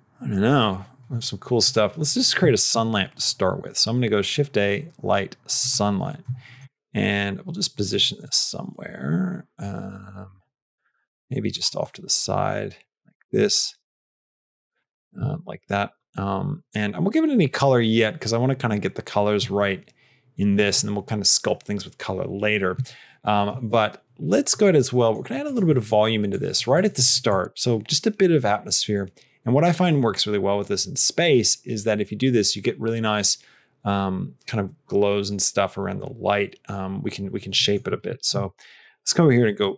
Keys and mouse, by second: 1.5 click, 6.6 r, 7.9 r, 11.8 r, 13.3 r, 24.8 middle click, 25.3 click, 25.7 middle click, 26.1 click, 26.6 click, 27.2 click, 37.5 middle click, 38.1 middle click, 38.3 shift+a.